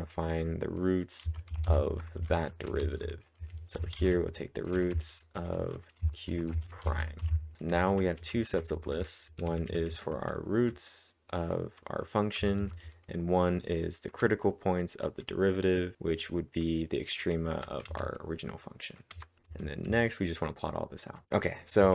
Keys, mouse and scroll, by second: 1.3-10.4 typing, 12.1-14.3 typing, 17.9 typing, 21.0-21.9 typing.